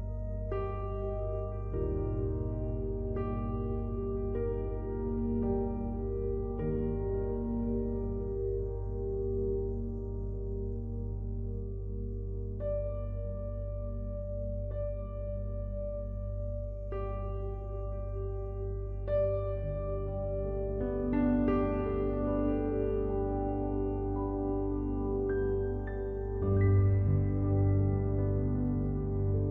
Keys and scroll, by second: 19.9 ctrl+z.